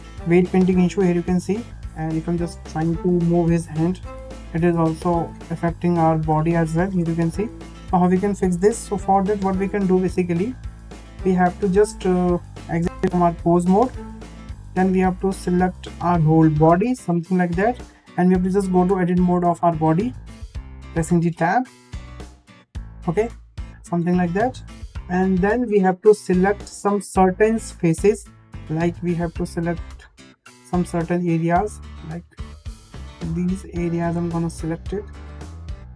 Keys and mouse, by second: 0.4 g, 2.3 shift+middle drag, 3.4 click, 4.2 g, 10.0 shift+middle click, 12.9 ctrl+Tab, 14.1 h, 16.1-16.9 drag, 19.4 Tab, 23.9 Tab, 25.2 click, 29.4 click, 33.5 shift+middle click, 34.2 shift+click.